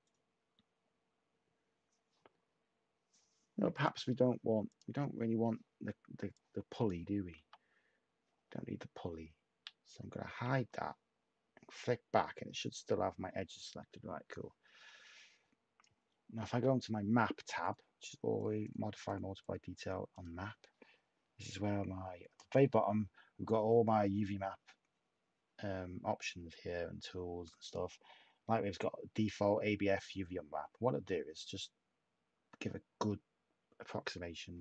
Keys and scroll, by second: 7.3 ], 10.3 =.